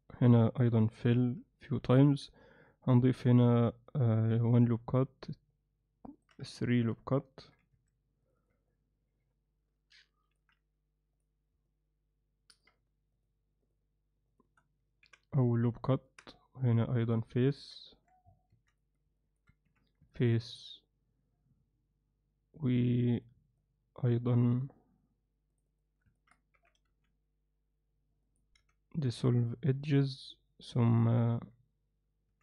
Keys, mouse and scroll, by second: 0.4 middle click, 2.3-3.4 alt+middle drag, 3.7 alt+middle click, 5.1-6.3 alt+middle drag, 7.5 ctrl+r, 8.7-10.4 middle drag, 11.7 middle click, 15.5 alt+middle click, 17.4 middle click, 19.2 alt+middle click, 19.7 f, 20.1-23.3 middle drag, 23.6 middle click, 26.2 ctrl+alt+middle click, 28.6 x.